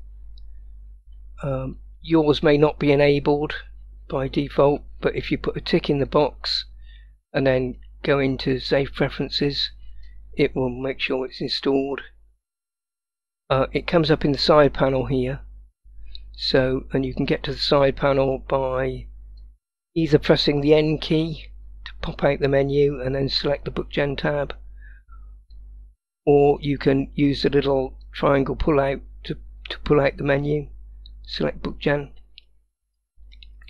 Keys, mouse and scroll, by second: 19.5 click, 21.0 n, 23.5 click, 25.6-26.6 drag, 28.1-30.5 drag, 32.7-33.4 scroll up 2, 33.4-33.6 middle drag.